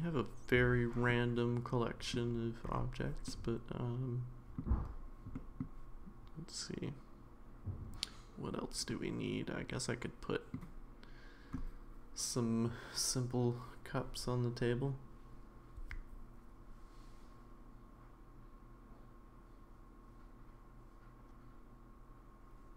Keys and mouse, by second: 1.1-2.1 middle drag, 3.3-4.6 middle drag, 5.4 middle drag, 8.9-10.5 middle drag.